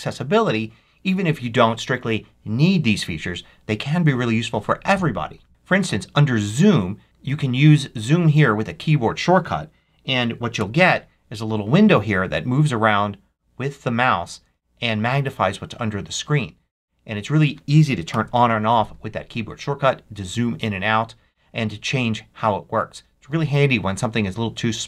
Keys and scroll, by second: 18.0 alt+super+8.